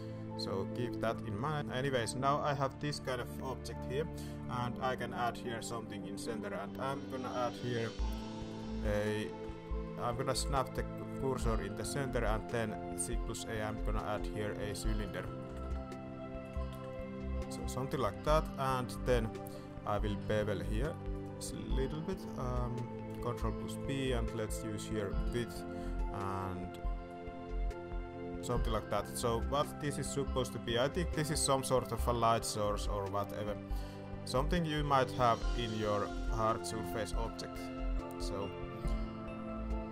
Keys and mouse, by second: 0.4 click, 1.5 middle drag, 2.1 middle click, 2.5 middle click, 2.8 shift+middle drag, 4.4 click, 5.0 shift+click, 5.7 shift+s, 10.2 shift+s, 11.9 alt+a, 14.1 s, 15.3 click, 15.4 s, 16.5 g, 18.0 alt+a, 19.4 alt+a, 20.0 ctrl+b, 23.2 ctrl+b, 25.1 click, 25.8 click, 27.0-28.4 shift+drag, 28.7 alt+a, 30.4 i, 36.4 alt+a, 37.4 ctrl+b.